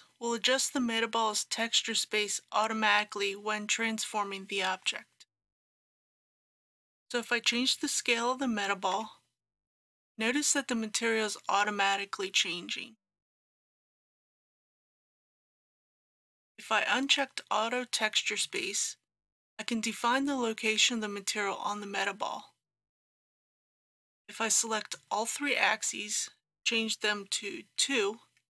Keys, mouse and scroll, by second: 6.3 ctrl+z, 8.9 s, 13.9 click, 14.9 ctrl+z, 16.0-25.3 drag, 27.8 KP_2.